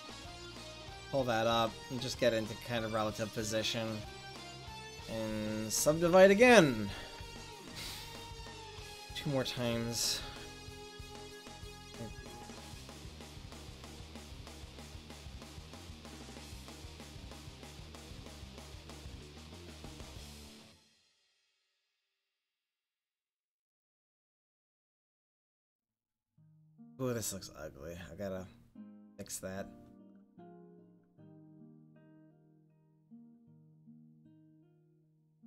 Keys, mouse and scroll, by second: 2.0-3.2 drag, 4.9 w, 8.6 middle click, 8.8 click, 9.5-10.7 middle drag, 10.7 right click, 15.4-19.4 right drag, 19.4 click, 19.7 middle click, 19.9 right click, 20.3-23.4 middle drag, 23.4 click, 23.8 middle click, 30.8-32.3 right drag, 32.1-34.0 middle drag, 34.0-35.4 right drag, 34.2-35.4 drag.